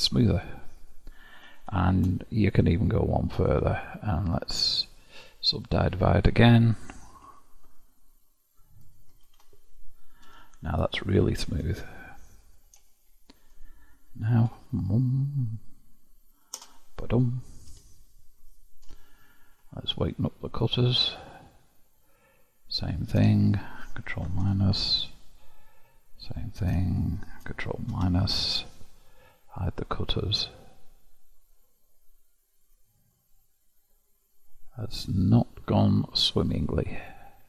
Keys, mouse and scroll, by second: 1.5 shift+click, 2.7-3.8 middle drag, 3.8-6.0 right drag, 6.0 click, 7.3 ctrl+w, 7.8-8.8 middle drag, 8.8 click, 9.2 ctrl+w, 10.2 KP_1, 11.0-14.3 shift+middle drag, 14.3 ctrl+r, 17.6 KP_7, 18.8 Tab, 20.5 click, 21.2-22.6 middle drag, 22.6 click, 23.4 shift+click, 24.4 ctrl+KP_Subtract, 26.2 click, 26.8 shift+click, 27.9 ctrl+KP_Subtract, 29.8 click, 30.6-33.6 middle drag, 36.0 click, 37.0 click.